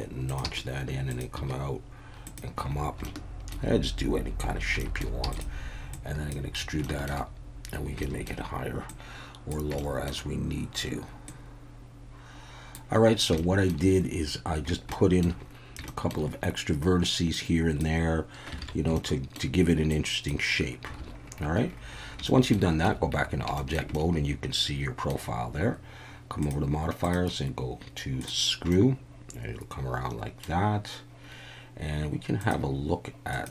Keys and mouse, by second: 0.3 click, 1.1 click, 1.1 e, 1.4 e, 2.2 click, 3.0 shift+middle click, 4.8 shift+middle click, 5.3 click, 6.0 click, 6.8 shift+middle click, 8.0 shift+middle click, 8.9 click, 9.8 shift+middle click, 11.3-12.7 drag, 13.4 shift+middle click, 14.9 shift+middle click, 15.9 shift+middle click, 17.5 click, 18.6 alt+a, 19.0 shift+middle click, 19.9 click, 22.3 shift+middle click, 22.9 Tab, 23.6 shift+middle click, 23.9-25.1 middle drag, 27.2-28.3 drag, 28.8-30.4 middle drag, 32.5-33.5 drag.